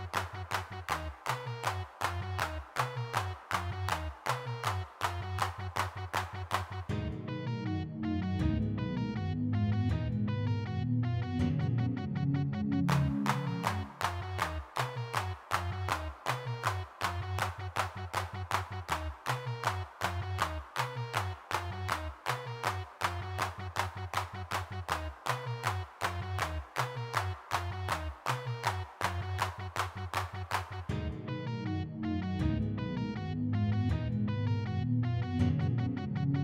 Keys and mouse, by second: 1.5 click, 1.6-2.8 middle drag, 2.9 click, 6.0 g, 6.1 f, 7.0 f, 8.3 middle click, 10.6 middle click, 11.2 3, 11.3 f, 11.7 middle click, 13.0 middle click, 14.7 middle click, 16.0-18.0 middle drag, 18.0 g, 18.0 f, 18.5 f, 24.5 3, 24.7 f, 25.2 click, 25.2 f, 26.0 click, 26.4-28.0 middle drag, 29.5-31.6 middle drag, 31.9 middle click.